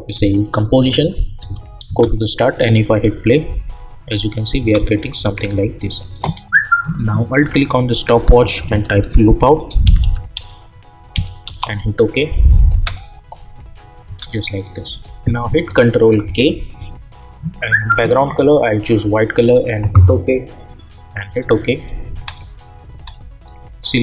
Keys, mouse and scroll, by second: 0.4-1.8 typing, 4.5-5.1 typing, 5.8 click, 7.3 alt+click, 8.3-9.4 typing, 9.8 Down, 11.5 Return, 12.5 click, 12.7 space, 14.9 click, 16.2 ctrl+k, 17.9 click, 22.1 space.